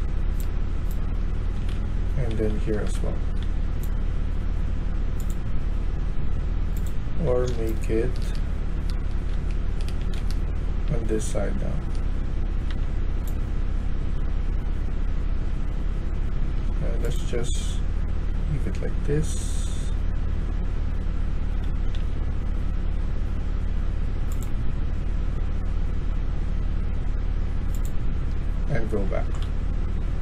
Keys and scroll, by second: 0.9-3.4 typing, 7.1-7.9 typing, 9.2-12.0 typing, 15.4-16.5 a, 21.6 q, 21.9 q, 28.4 s, 28.7 s, 29.0 s, 29.2 s.